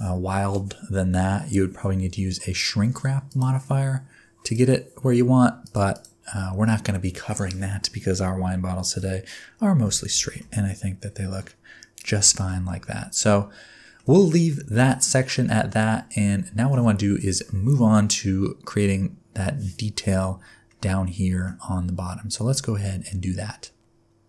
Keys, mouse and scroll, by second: 3.3 click, 4.4 click, 5.6 click, 5.9 click, 8.1 middle click, 9.3 scroll up 1, 9.5-9.9 scroll down 3, 9.9 alt+a, 10.3 shift+middle click, 10.6 middle click, 12.3 shift+middle click, 12.7 middle click, 14.2 shift+middle click, 15.0 shift+middle click, 20.7 middle click.